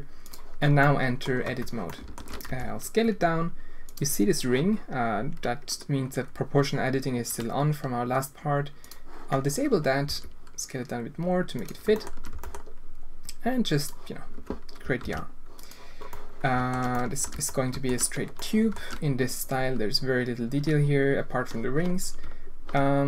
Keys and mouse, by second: 0.9 drag, 1.4 Tab, 1.9 alt+click, 2.4 s, 8.8 click, 10.0 s, 12.3 e, 15.0 ctrl+r, 16.2 click, 17.5 alt+shift+click, 18.4 click.